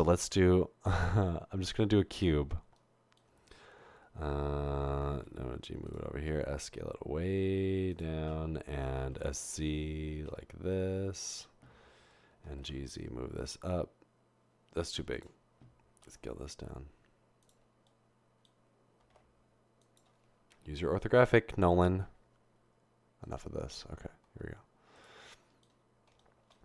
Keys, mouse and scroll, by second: 5.3-6.2 typing, 9.0 typing, 12.5 typing, 16.0 typing, 19.0 typing, 21.0 1, 24.4 typing.